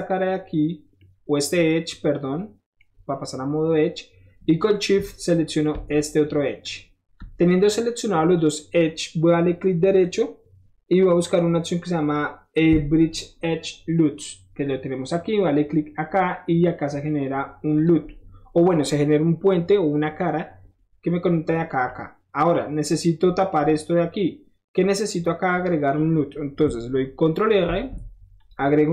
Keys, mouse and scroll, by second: 1.0-2.8 scroll up 1, 4.6 middle click, 4.7-5.6 scroll up 1, 6.6 shift+click, 7.5 shift+middle click, 10.0 click, 15.4 click, 16.3 middle click, 17.7 click, 18.1 middle click, 21.9 middle click, 24.0 middle click, 27.6 ctrl+r, 28.4 click.